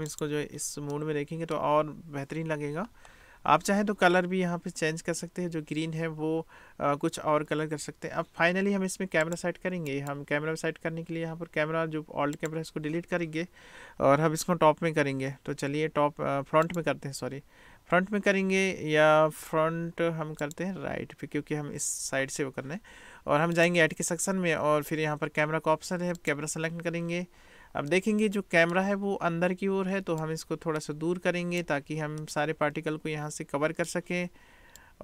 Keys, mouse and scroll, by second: 0.2 click, 1.2 click, 10.0-12.6 drag, 23.6-26.4 drag, 28.2-28.9 middle drag, 30.2-31.7 drag, 32.3-34.0 middle drag, 34.9-35.0 drag.